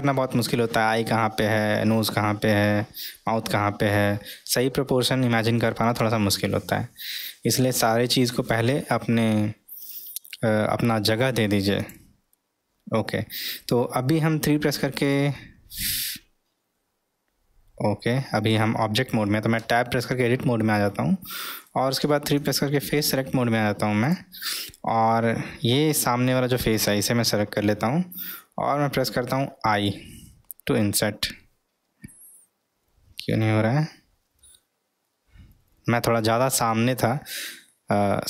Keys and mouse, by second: 10.1-11.5 middle drag, 11.7 click, 14.5 3, 15.0 drag, 19.6 Tab, 22.0 3, 23.0 click, 24.1 click.